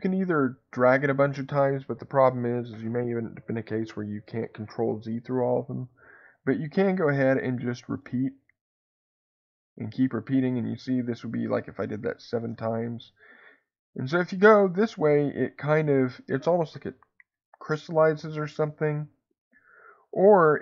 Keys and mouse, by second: 6.7 click, 7.4 click, 7.8 click, 8.3 click, 8.7 click, 9.8 click, 12.0 click, 12.3 click, 12.8 click, 14.2 click, 19.1 click, 19.5 click.